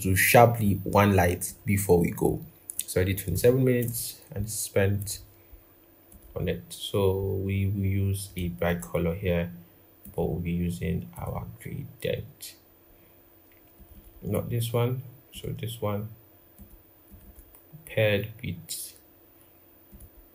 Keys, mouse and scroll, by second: 6.9-8.4 scroll up 1, 8.4 double click, 13.7 double click, 17.0 double click.